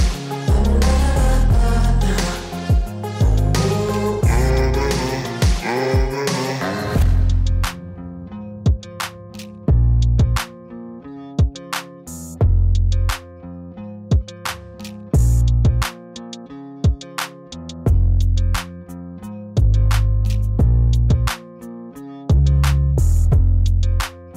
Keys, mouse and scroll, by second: 0.0 click, 3.3 click, 5.3 click, 8.1 click, 9.0 click, 10.7 0, 10.9 Return, 11.2 click, 13.7 click, 14.7 click, 15.0 alt+click, 21.0 click, 24.2 Up.